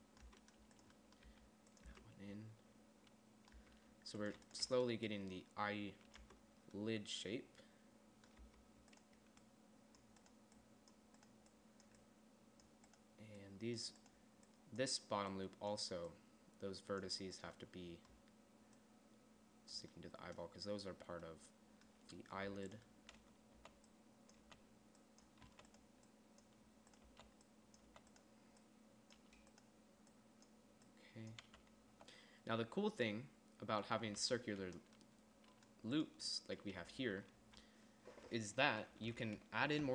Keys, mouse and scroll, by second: 0.2 Tab, 0.7 Tab, 1.7 g, 2.3 Tab, 4.0 Tab, 6.7 Tab, 8.8 Tab, 23.6 z, 24.0 z, 24.8 z, 25.9 z, 27.5 z, 28.3 z, 31.9 z, 32.4 z, 34.4 z, 34.6 z.